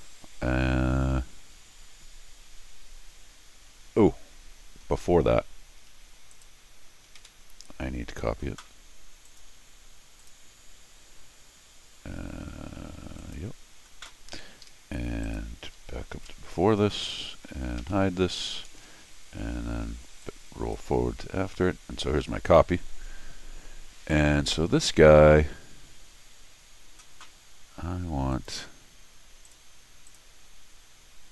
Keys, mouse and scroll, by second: 5.3 scroll down 2, 6.3 click, 7.2 ctrl+alt+r, 9.2 click, 10.2 click, 13.2 click, 14.6 Escape, 15.2 click, 16.1 ctrl+alt+r, 17.8 Tab, 20.2 click, 22.1 scroll up 2, 28.3 click, 29.4 click, 30.1 click.